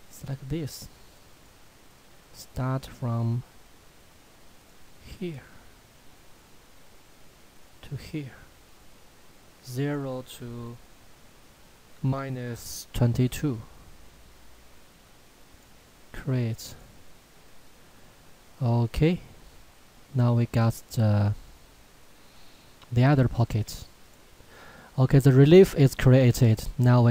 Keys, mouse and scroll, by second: 1.3 click, 4.6 click, 7.6 click, 15.4 click, 17.9-18.7 scroll down 1, 19.2 middle click, 24.0 click, 24.8 middle click.